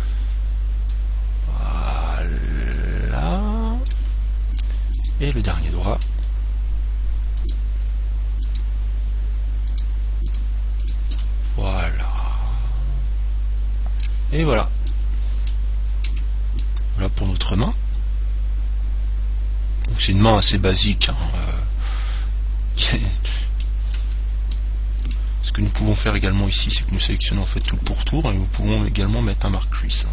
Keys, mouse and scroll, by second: 1.1 click, 5.2 right click, 7.6-12.8 right drag, 12.4 click, 14.6-18.9 middle drag, 16.3 Tab, 24.2 Tab, 24.7-26.7 middle drag, 27.2 right click, 28.8 click.